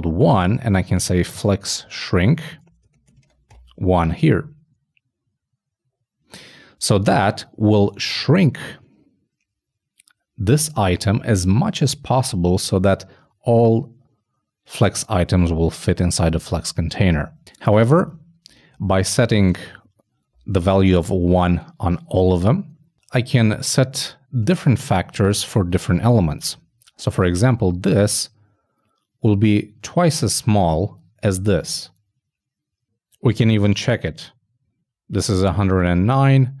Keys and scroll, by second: 2.8 shift+Return, 2.9 shift+;, 3.2 shift+space, 18.8 shift+Right, 19.6 shift+\, 22.9 shift+Right, 34.0 shift+super+f.